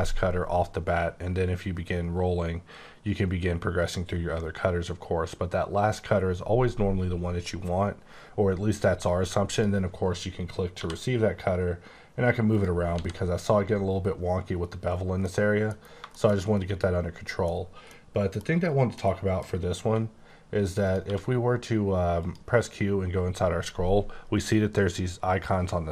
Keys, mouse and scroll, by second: 2.6-3.2 scroll down 2, 3.2-3.8 scroll down 2, 3.8-4.9 scroll up 5, 4.9-5.9 scroll down 1, 9.5 click, 10.7 g, 12.4 click, 13.0 h, 15.2 h, 15.3 middle click, 15.7 scroll down 2, 16.1 middle click, 16.4 double middle click, 17.8 middle click, 18.9 middle click, 19.8 q, 20.8 click, 21.0 q, 22.2 click.